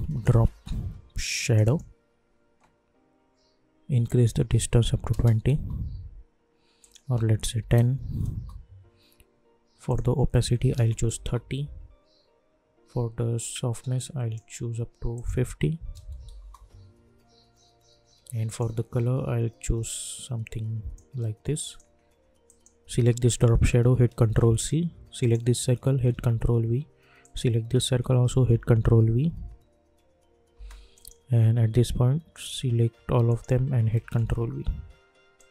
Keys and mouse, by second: 0.0-0.8 typing, 1.4 click, 4.0 click, 5.5 Return, 6.8 click, 8.3 Return, 9.8 click, 11.1 Return, 13.4-15.1 drag, 16.3 Return, 18.4-21.6 drag, 24.2 ctrl+c, 25.2 click, 26.0 ctrl+v, 27.2 click, 28.4 ctrl+v, 29.3 space, 30.9 click, 33.2 shift+click, 34.1 ctrl+v, 35.3 click.